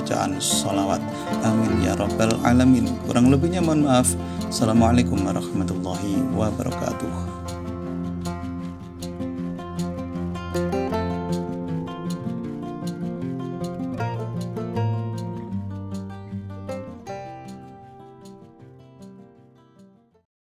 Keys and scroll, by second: 2.6 s.